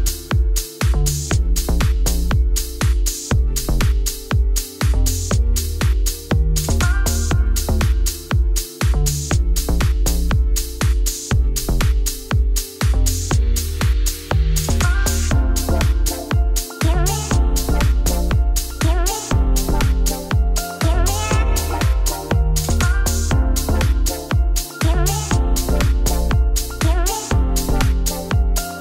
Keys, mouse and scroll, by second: 0.2-1.3 middle drag, 1.3-1.9 scroll down 4, 1.9 shift+middle click, 2.7 scroll, 3.0 click, 3.2 right click, 3.9 shift+middle click, 4.2 scroll down 1, 4.5-6.0 shift+middle drag, 6.0 shift+click, 6.5 l, 6.7 l, 7.3 click, 7.7 shift+click, 8.1 ctrl+l, 8.6 shift+middle click, 8.9 scroll up 5, 9.1 click, 9.5 shift+middle click, 10.5 click, 10.9 click, 12.6 middle click, 13.1 KP_Decimal, 13.4 shift+middle click, 13.6-14.8 scroll up 4, 14.8 scroll up 1, 14.8 click, 15.2 shift+middle click, 15.5-16.1 scroll up 1, 16.8 click, 17.2 KP_0, 18.0 Tab, 18.7-20.4 alt+drag, 22.9-25.2 alt+drag, 25.2 z, 25.8 middle click, 26.4 Tab, 26.7 2, 26.9 alt+click, 27.4 z, 27.7 middle click, 28.6 alt+click.